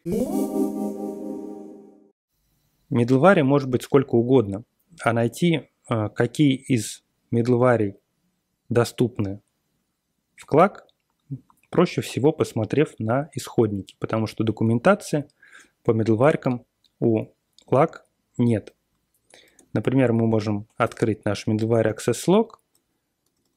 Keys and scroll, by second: 19.4 ctrl+x, 20.8 Return, 21.6 ctrl+x, 21.8 ctrl+f, 22.3-23.5 typing.